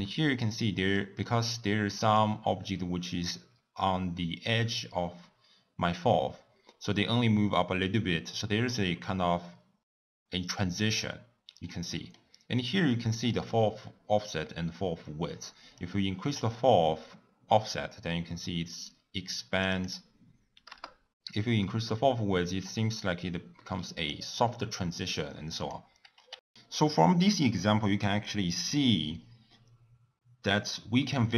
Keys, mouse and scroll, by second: 0.1-4.2 middle drag, 11.6-12.5 middle drag, 12.5-12.9 scroll up 2, 12.9-15.8 middle drag, 15.8-18.8 drag, 19.7-24.4 drag, 25.6 click.